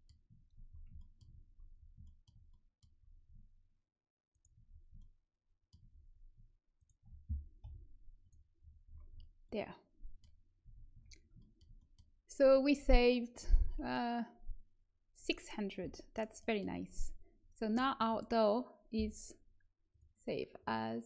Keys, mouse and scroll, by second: 4.2-7.6 right drag, 7.6 Delete, 8.1-9.4 right drag, 9.4-10.6 middle drag, 10.6 a, 10.9 Tab, 19.8-21.0 drag.